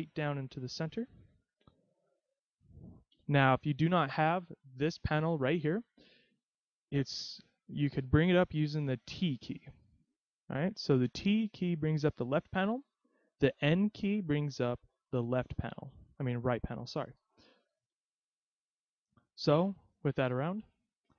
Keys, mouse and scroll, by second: 0.5-1.3 scroll down 1, 2.3-2.6 scroll down 2, 3.2 KP_3, 4.9-5.5 scroll down 1, 5.5-7.3 scroll up 6, 9.2 t, 11.6 t, 13.3 n, 13.9 n, 17.9 n, 18.6 n, 19.7-20.2 scroll down 1.